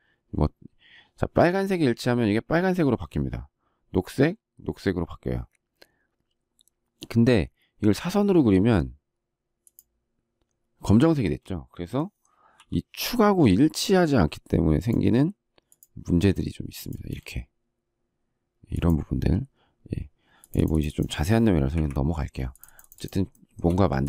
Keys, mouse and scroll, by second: 11.2 space, 16.9 space, 21.7 Delete, 23.3 shift+middle click, 24.0 shift+click.